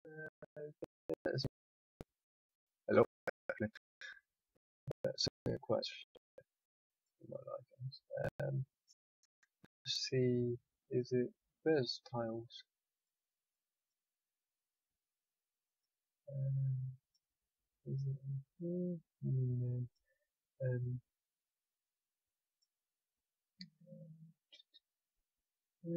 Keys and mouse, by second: 8.6-25.9 drag.